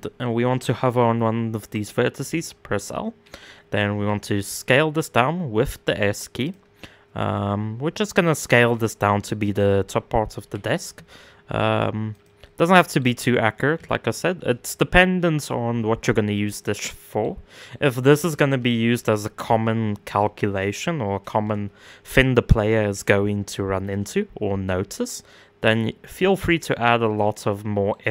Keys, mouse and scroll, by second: 1.7 l, 2.4-3.5 middle drag, 3.5 s, 6.3-8.1 middle drag, 8.1 s, 10.0 g, 12.0 middle click, 12.7-13.3 scroll up 4, 13.3 s, 16.2-17.4 middle drag, 17.4 scroll down 1, 17.7 s, 26.2-28.1 middle drag.